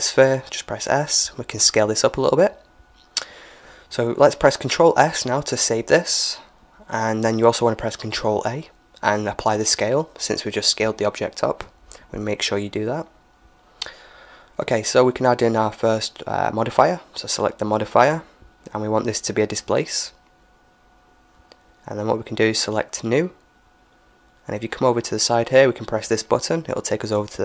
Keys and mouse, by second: 0.5 s, 4.4 ctrl+s, 6.3 ctrl+s, 8.5 ctrl+a, 12.0-14.7 middle drag, 15.0-18.6 drag, 23.1-27.4 drag.